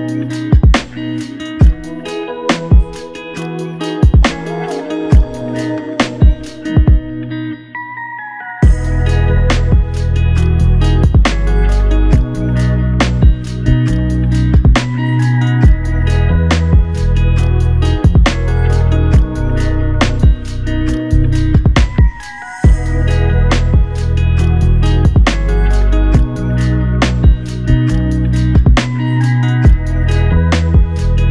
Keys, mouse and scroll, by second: 1.6 double click, 6.1 ctrl+alt+click, 8.0 alt+shift+click, 11.7 double click, 14.2 alt+click, 15.9 double click, 16.7 shift+click, 18.6 alt+click, 20.6 double click, 21.9 ctrl+alt+click, 23.3 alt+shift+click, 25.7 alt+click, 27.1 double click, 30.3 alt+click.